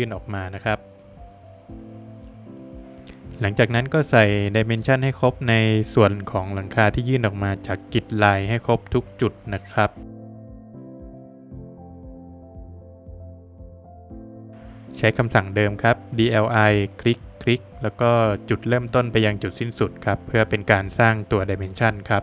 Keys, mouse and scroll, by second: 0.5 click, 2.7 click, 2.8 Escape, 2.8 middle click, 2.8 scroll down 1, 3.6 middle click, 6.2 space, 7.5 click, 9.5 scroll down 1, 10.3 scroll down 1, 10.7 middle click, 11.1 scroll up 1, 11.4 middle click, 11.5 middle click, 11.6 Escape, 11.8 scroll up 2, 12.3 click, 12.9 Escape, 13.0 scroll down 2, 13.1 middle click, 13.4 Escape, 13.6 Escape, 14.9 space, 15.5 click, 17.7 Escape, 17.8 scroll down 3, 19.1 Escape, 19.1 scroll up 2, 19.9 middle click, 20.6 Escape.